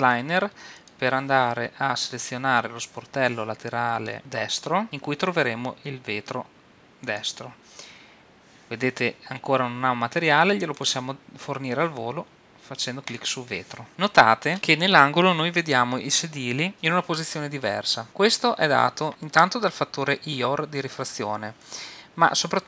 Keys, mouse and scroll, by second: 0.7-2.6 drag, 4.8-13.4 drag, 13.9-16.8 middle drag.